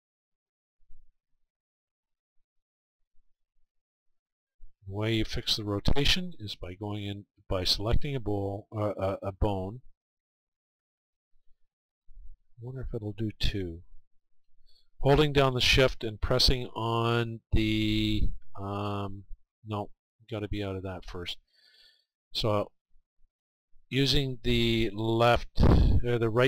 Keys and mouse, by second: 0.4-2.9 right drag, 1.2-4.5 middle drag, 4.5-26.0 drag.